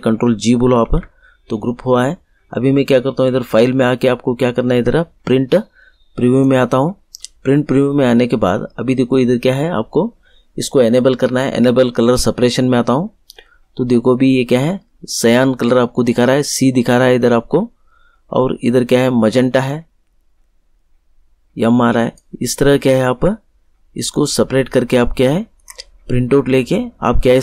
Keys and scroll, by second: 0.8 ctrl+g.